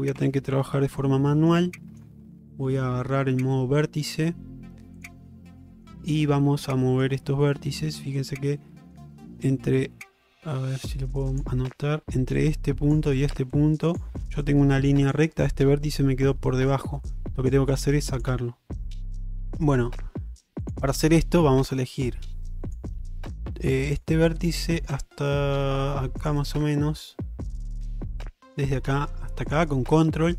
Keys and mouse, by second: 0.2 Tab, 0.7 middle click, 1.4 shift+middle click, 1.8 middle click, 2.6 shift+middle click, 3.1 middle click, 3.8 middle click, 5.0 click, 5.7 shift+middle click, 6.1 middle click, 7.6 middle click, 8.7 middle click, 24.6 shift+middle click, 28.5 click, 29.5 ctrl+click.